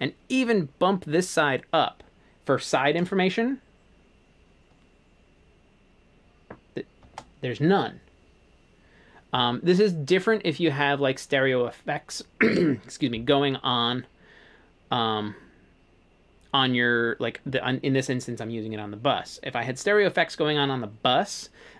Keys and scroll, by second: 3.0 space, 7.1 space.